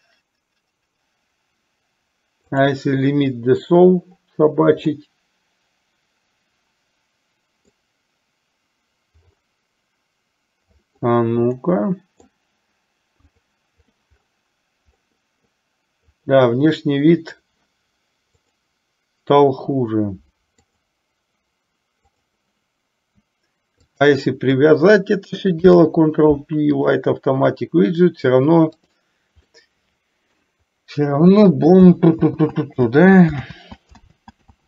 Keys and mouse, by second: 5.1-7.9 middle drag, 11.7 middle click, 13.6 click, 15.2 middle click, 16.2 click, 18.4 click, 20.7 click, 23.9 shift+click, 25.6 ctrl+p, 29.6-30.7 middle drag, 32.3 ctrl+z, 33.6 ctrl+z, 34.2 ctrl+z.